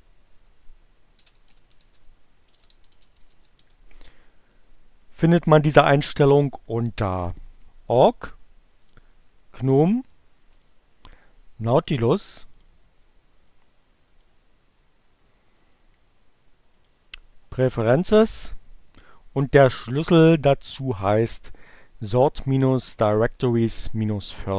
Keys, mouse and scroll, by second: 0.4-3.1 typing, 3.5 Return, 7.1 click, 8.7 click, 9.8-12.1 drag, 12.4 click, 13.3-14.4 drag, 16.8 click, 17.3 click, 18.8-20.3 drag, 21.1 click.